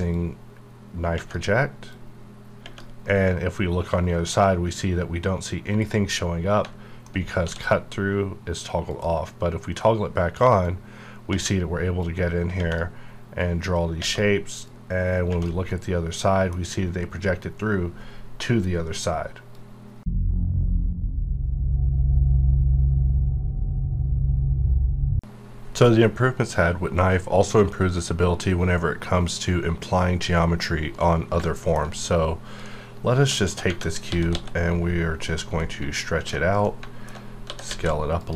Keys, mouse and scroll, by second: 0.1 click, 1.9 click, 3.1-5.1 middle drag, 5.1 scroll down 1, 7.4 d, 8.9 click, 12.0 click, 13.4 click, 14.7 click, 15.7-18.8 middle drag, 31.3 alt+Num_Lock, 32.6 middle click, 34.1 s, 34.3 x, 35.2 click, 35.6 middle click, 36.4 scroll down 1, 36.5 scroll up 1, 36.6 middle click, 37.2 scroll down 1, 37.4 s, 37.6 z, 38.2 click.